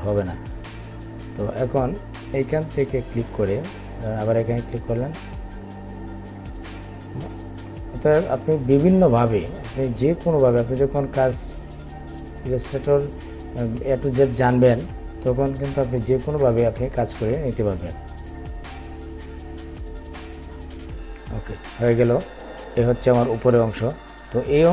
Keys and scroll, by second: 18.5 Up.